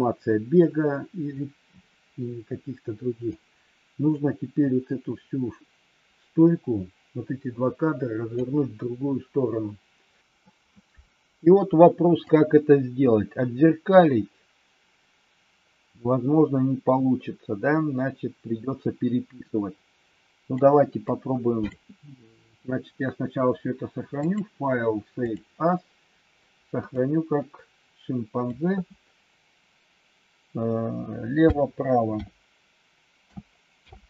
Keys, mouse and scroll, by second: 3.2-8.4 drag, 12.1-20.6 drag, 21.0 click, 24.1 click.